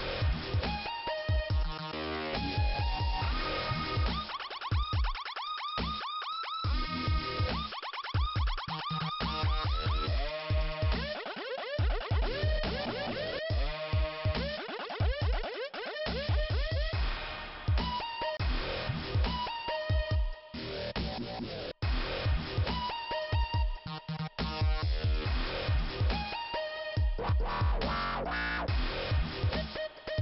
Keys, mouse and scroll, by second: 2.1 click, 2.3 click, 4.9 click, 10.6 click, 16.3 click, 17.2 right click, 19.1 click, 20.9 click, 21.3 click, 24.9 click, 25.3 click, 28.5 click, 28.7 click, 29.6 click.